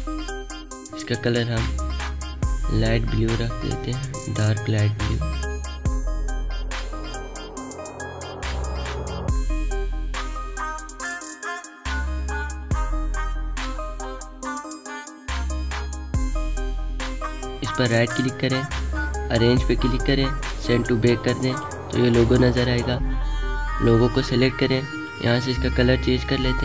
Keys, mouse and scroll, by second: 2.8-7.8 drag, 8.3 space, 8.4-13.8 drag, 14.3 alt+scroll down 1, 14.6 space, 14.9 click, 14.9-15.4 alt+scroll up 1, 17.9-18.9 alt+scroll up 1, 20.7-26.6 drag.